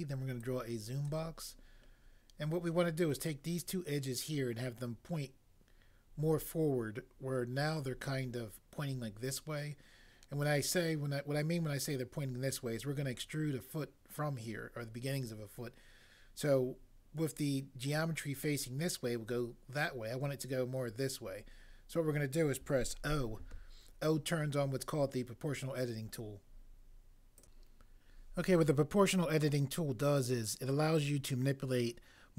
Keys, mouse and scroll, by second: 23.1 o.